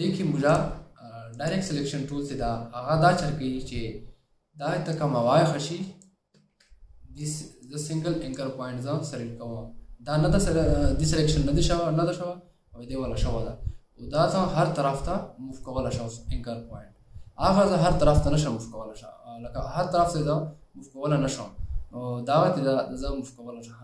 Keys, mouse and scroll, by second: 6.6 ctrl+z.